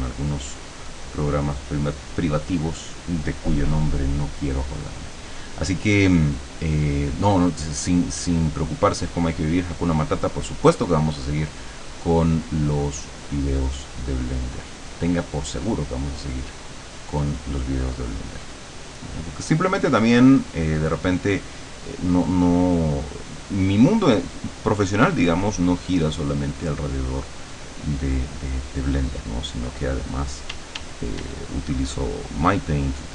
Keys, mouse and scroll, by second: 0.6 click, 1.0 click, 4.9 click, 7.8-8.8 drag, 9.3-10.4 drag, 10.6-12.6 drag, 13.0-14.0 drag, 15.2 click, 15.7-17.0 drag, 18.0 click, 19.8-29.8 drag, 30.6 d, 31.6-33.1 drag.